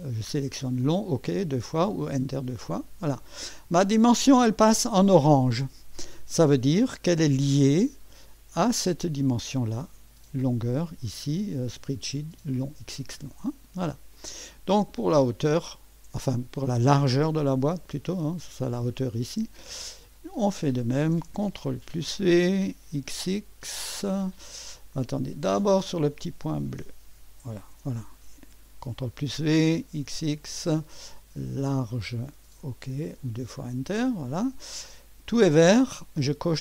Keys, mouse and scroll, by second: 0.9 click, 1.8 click, 8.3 click, 11.7 click, 14.2 click, 15.7 click, 20.2 click, 21.7 ctrl+v, 23.4 typing, 26.2 click, 27.6 ctrl+v, 29.9 typing, 31.7 click, 32.7 click, 33.6 click, 33.7-34.4 typing.